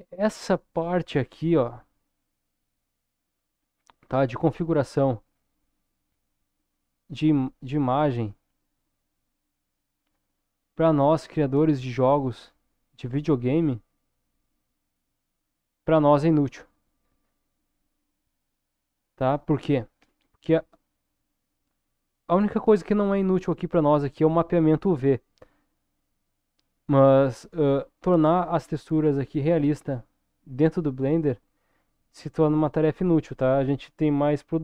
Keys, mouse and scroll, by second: 1.9 middle click, 4.0-4.4 scroll down 2, 4.6-5.0 scroll down 3, 5.4-6.7 middle drag, 9.3-10.5 drag, 11.3 middle click, 12.2 scroll down 1, 12.7-15.2 middle drag, 27.4-29.1 scroll up 1, 29.1-30.2 middle drag, 31.0-34.6 middle drag.